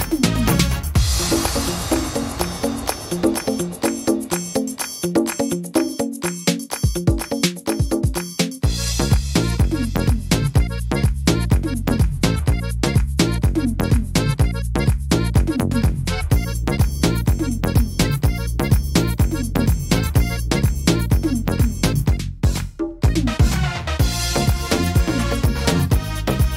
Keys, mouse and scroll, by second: 0.5 middle click, 2.0 ctrl+r, 3.3 s, 4.5 middle click, 4.9 scroll down 2, 5.3 middle click, 6.0 scroll up 2, 7.2 right click, 9.6 right click, 10.8 right click, 11.0 shift+right click, 11.5 shift+right click, 11.9 shift+right click, 12.2 right click, 12.7 right click, 13.2 shift+right click, 13.5 right click, 13.9 shift+right click, 14.7 click, 17.6 middle click, 17.8 shift+middle click, 18.6 ctrl+r, 19.6 middle click, 21.6 click, 22.6 right click, 25.9 shift+right click.